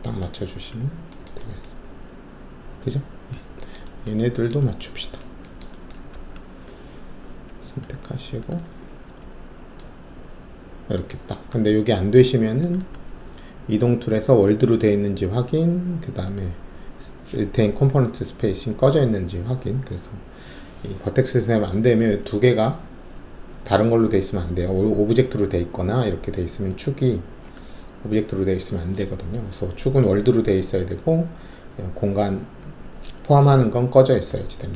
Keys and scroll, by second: 0.4 alt+`, 6.1 alt+1, 9.1-9.9 typing, 12.3 typing.